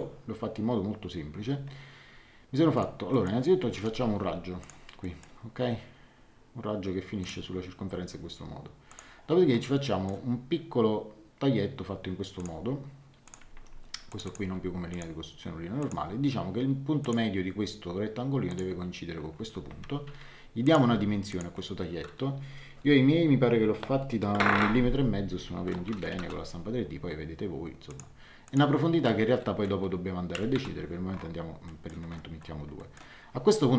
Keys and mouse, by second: 2.7 middle click, 3.7 l, 4.6 click, 5.0 middle click, 7.2 click, 8.8 click, 12.3 click, 13.5 Escape, 14.1 click, 14.4 x, 14.9 click, 17.0 click, 18.5 click, 19.6 Escape, 20.8 d, 21.3 click, 25.8 KP_1, 26.0 KP_5, 26.2 KP_Enter, 27.8 click, 30.3 KP_2, 30.5 KP_Enter, 31.6 middle click, 32.7 middle click.